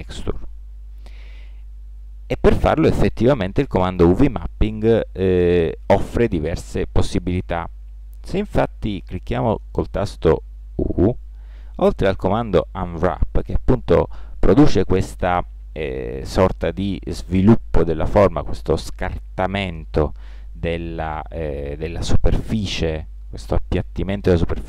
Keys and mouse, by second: 10.7 u.